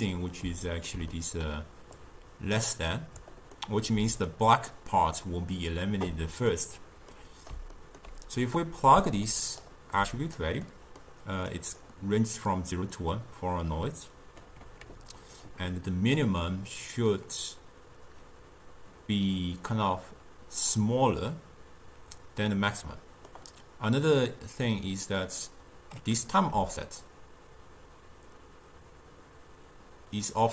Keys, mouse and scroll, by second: 0.2-2.1 middle drag, 2.1 click, 3.6-8.7 middle drag, 8.7-10.8 drag, 10.8 middle click, 11.6-13.6 drag, 23.0-25.3 middle drag, 25.3-28.4 drag.